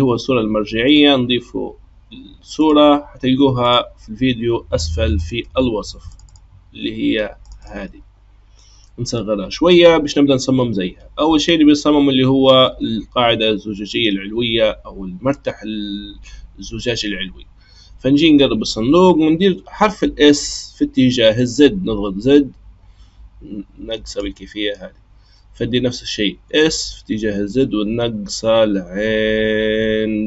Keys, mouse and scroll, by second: 2.5-5.7 drag, 8.6-10.7 scroll down 4, 17.7-19.9 scroll up 3, 19.9 s, 24.5-26.3 scroll up 3, 26.3 s.